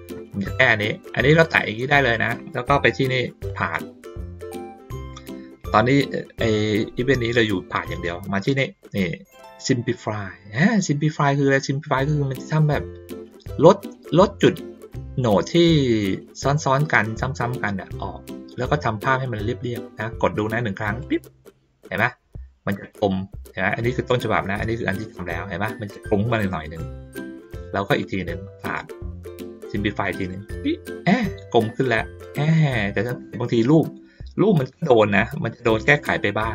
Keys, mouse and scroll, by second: 1.4-2.1 drag, 3.5 click, 21.0 click, 22.5 ctrl+middle click, 28.0 click, 30.2 click, 32.3 ctrl+middle click, 34.3 ctrl+middle click, 36.0 ctrl+middle click.